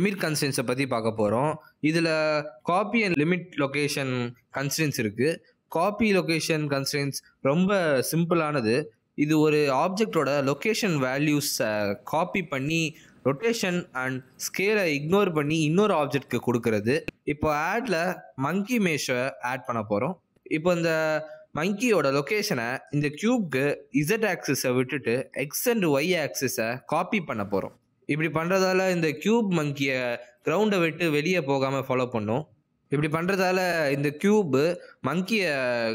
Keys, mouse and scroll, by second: 0.5 click, 1.5 click, 9.3 click, 11.8 click, 12.8 r, 13.2 s, 15.3 ctrl+z, 15.6 ctrl+z, 17.0 click, 21.5 g, 22.5 r, 23.7 r, 32.3 click, 32.8 g.